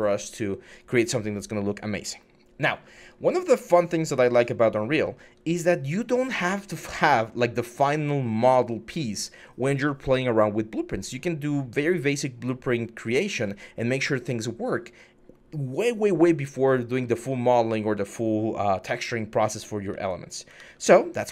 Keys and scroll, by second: 3.6-5.6 typing, 19.7 typing, 20.4 alt+Tab.